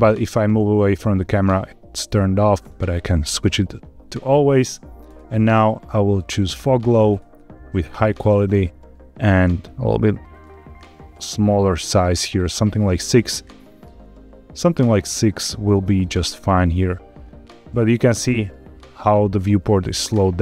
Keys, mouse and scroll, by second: 1.4-3.3 drag, 5.0-6.5 drag, 7.1-8.4 drag, 10.7 click, 11.8 click, 13.5 click, 14.9 click, 16.5-19.3 middle drag.